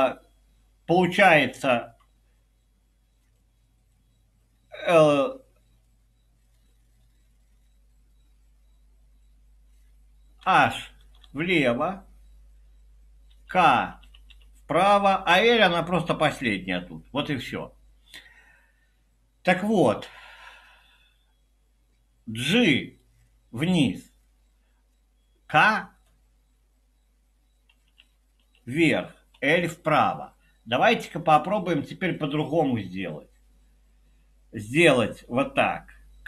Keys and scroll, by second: 10.5-11.2 typing, 13.3-14.8 typing, 27.8-29.7 typing.